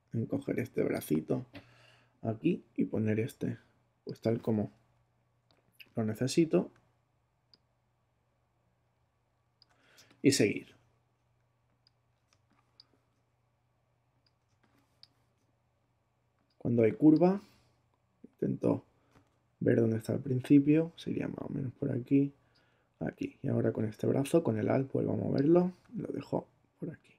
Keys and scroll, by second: 4.9 alt+Right, 5.5 Right, 9.9 alt+space, 10.7 space, 12.3 space, 14.4 space, 16.7 space.